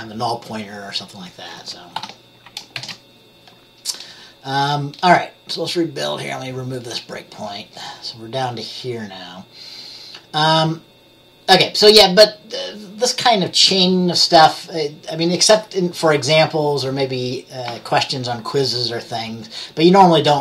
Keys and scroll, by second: 2.1 ctrl+s, 2.9 ctrl+b.